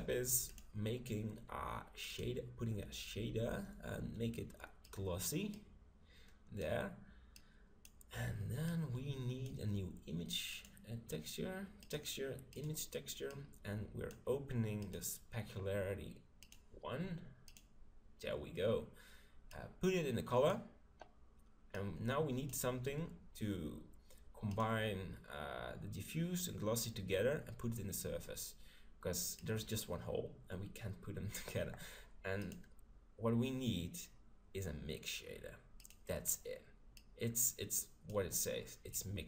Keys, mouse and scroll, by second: 0.5-2.2 drag, 5.5-10.4 drag, 10.6-12.2 drag, 13.4-14.9 drag, 17.7-19.5 drag, 19.6-21.4 drag, 21.7-23.7 drag, 24.5-26.4 drag, 29.4-31.2 drag, 32.4-34.2 drag, 37.2-38.7 drag, 39.0-39.2 drag.